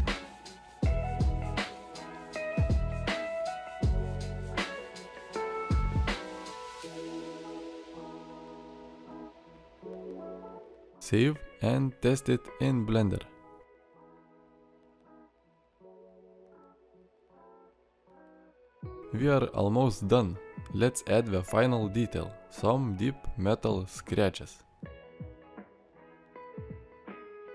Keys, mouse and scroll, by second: 16.2 alt+r, 17.6-19.0 drag, 19.0 middle click, 24.8-26.1 middle drag.